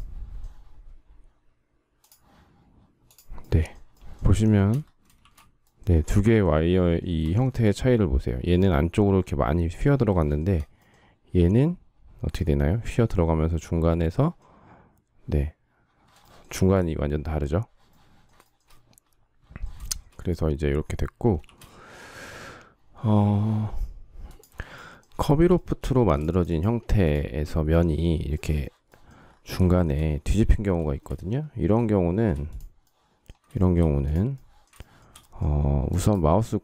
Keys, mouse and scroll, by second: 4.0 shift+middle click, 4.8 shift+c, 6.7 space, 9.8 shift+middle click, 15.9 shift+middle click, 18.1 shift+middle click, 19.5 shift+middle click, 19.6 shift+middle click, 21.1 shift+c, 24.9 shift+middle click, 29.4 shift+middle click, 30.7 shift+middle click, 33.2 shift+middle click, 34.5 shift+middle click.